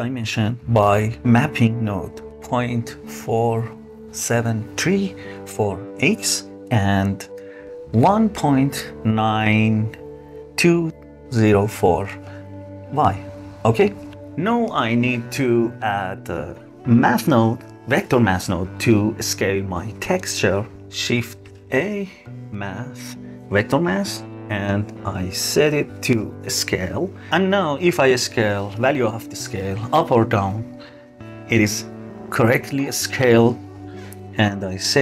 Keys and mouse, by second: 2.3-6.9 drag, 8.1-10.6 drag, 12.8 click, 13.5-15.0 drag, 17.4 shift+a, 25.6-26.5 drag, 27.6-33.1 drag, 33.6 click.